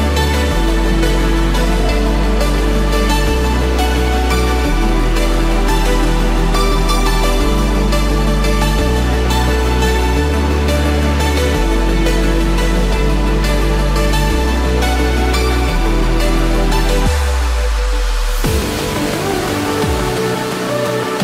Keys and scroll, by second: 1.6 ctrl+z, 8.0 ctrl+z, 15.5 ctrl+=, 19.2 ctrl+-, 19.6 ctrl+0.